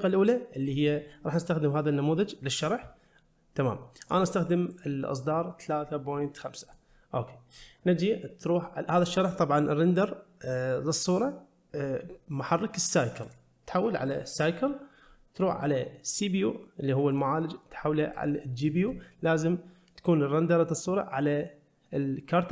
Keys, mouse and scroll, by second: 2.4 scroll up 2, 4.0-6.7 drag, 9.0-13.4 drag, 17.1-18.3 drag.